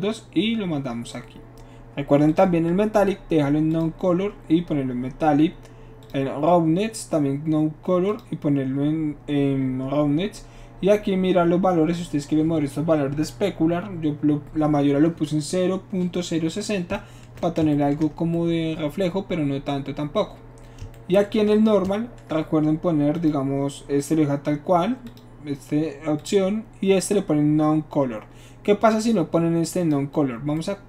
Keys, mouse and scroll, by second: 2.3 click, 3.7 click, 6.0 click, 8.1 click, 23.2 shift+click, 25.1 click, 26.2 click, 29.8 click.